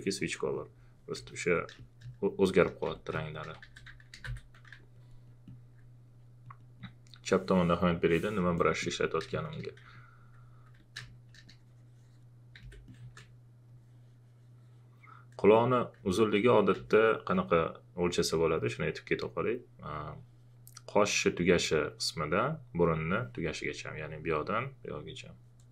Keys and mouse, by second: 1.1 v, 1.3 alt+click, 1.7 space, 3.0 click, 3.4-4.7 typing, 4.9 alt+click, 8.6 alt+click, 9.3 space, 9.3 click, 9.9 alt+click, 11.0 space, 11.0 click, 11.4 ctrl+click, 12.6 ctrl+z, 12.8 click, 16.7 ctrl+a, 17.1 ctrl+click, 18.5 ctrl+click.